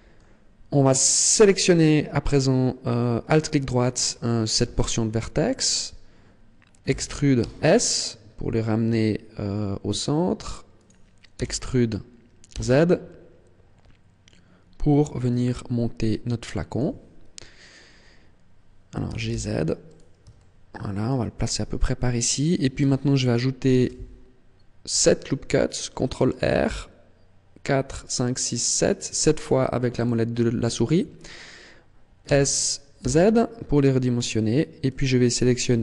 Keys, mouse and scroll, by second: 1.3 alt+right click, 4.6 KP_1, 6.8 e, 10.8 click, 11.4 e, 16.8 click, 17.4-18.3 scroll up 1, 18.3 scroll up 1, 19.0 g, 19.9 click, 20.3 shift+middle click, 23.7 ctrl+r, 30.0 click, 32.2 s, 35.0 click.